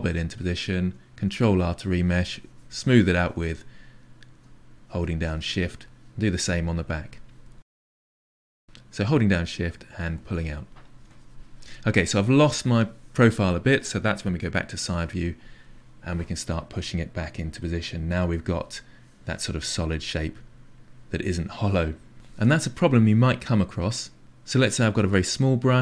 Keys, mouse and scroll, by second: 0.2 click, 0.5-1.5 middle drag, 1.5 ctrl+r, 1.9 middle click, 2.2-3.5 shift+drag, 4.2 middle click, 4.9 shift+click, 5.5 middle click, 6.2 click, 6.9 click, 7.4 click, 7.8 click, 8.2 shift+click, 8.7 ctrl+r, 8.9 middle click, 9.7 shift+click, 10.6 click, 10.8 click, 11.1 middle click, 11.2 shift+click, 11.8-14.8 middle drag, 14.8 KP_3, 16.9 click, 17.6 click, 18.0 click, 19.6-22.1 drag, 24.9 f.